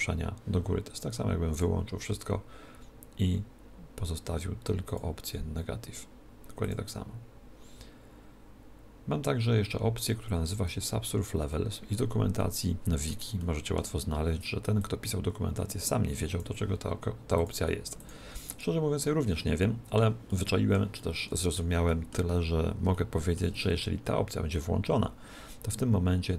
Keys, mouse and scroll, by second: 1.6 click, 4.9-8.5 drag, 12.4-15.1 middle drag, 15.0 click, 17.5 click, 19.6-24.8 middle drag.